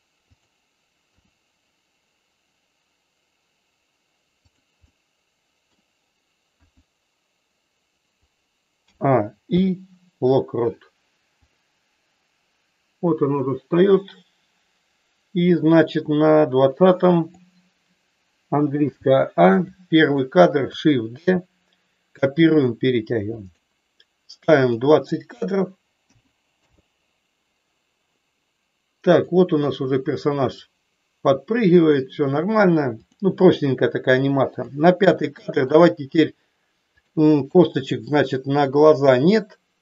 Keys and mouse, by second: 1.2 g, 4.9 middle click, 6.5 KP_1, 8.7 a, 9.5 i, 11.5-17.5 drag, 18.9 a, 19.6 click, 21.2 shift+d, 23.4 click, 24.6-26.9 drag, 29.0 click, 33.0 click, 34.5 click, 35.2 shift+middle click, 37.0 click.